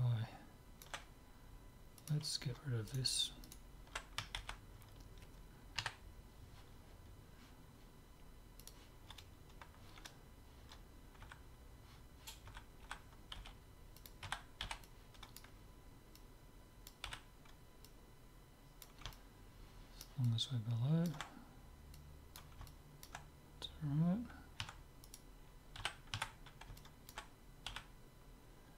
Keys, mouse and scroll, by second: 2.0-4.0 drag, 2.9-5.5 right drag, 4.4 ctrl+x, 5.8 KP_3, 8.6-10.6 drag, 11.3 a, 12.5-14.8 typing, 16.2-19.8 drag, 17.1 z, 19.2 right click, 19.8-21.9 middle drag, 22.1 click, 22.7-23.8 middle drag, 24.6 Tab, 25.1-26.8 right drag, 25.8 z, 26.3 Tab, 26.8-28.7 middle drag, 27.8 z.